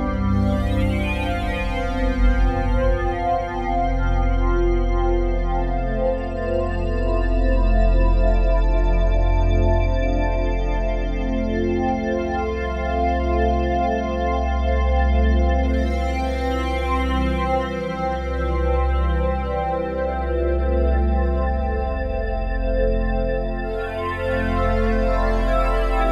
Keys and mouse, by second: 5.4 click, 6.5 shift+s, 8.4 Escape, 9.3-11.8 shift+drag, 12.1 ctrl+p, 13.2 Return, 14.5 r, 14.8 x, 14.9 x, 18.8 Escape, 19.6 ctrl+alt+click, 20.6 click, 21.2-22.2 drag, 22.0 ctrl+s, 22.3 alt+a, 22.8-26.1 alt+shift+drag.